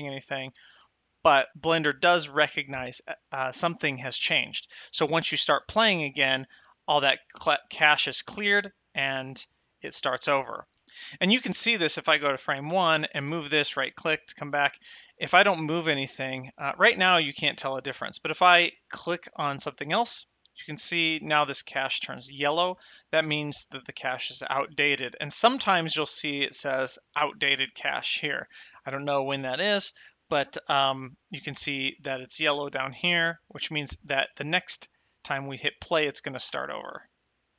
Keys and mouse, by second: 6.8 space, 12.5 shift+click, 13.5 g, 13.9 right click, 19.5 click, 30.8 click, 32.1 click, 33.3 click, 34.6 click, 36.7 space.